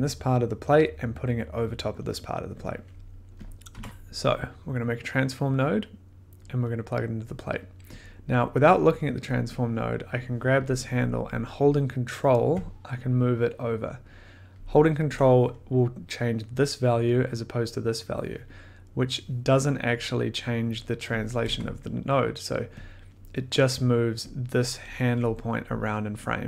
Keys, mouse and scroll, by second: 3.4 click, 3.7 t, 4.3 click, 6.4 click, 8.2 click, 8.2 middle click, 8.4 scroll, 9.4 click, 9.8 middle click, 10.2 scroll, 14.5 ctrl+click, 17.3-18.2 scroll, 21.3 click, 21.4 1, 22.8 click, 22.9 middle click, 23.2 middle click, 25.2 middle click, 26.2 ctrl+click.